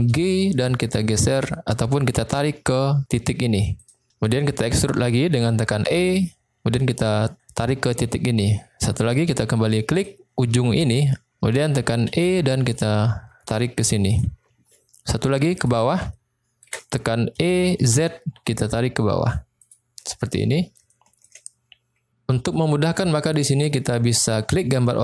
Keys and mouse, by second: 5.9 e, 8.2 click, 10.0 click, 12.1 e, 13.9 click, 15.5 click, 16.1 shift+middle click, 17.3 e, 17.9 z, 19.5 click, 20.9 shift+middle click.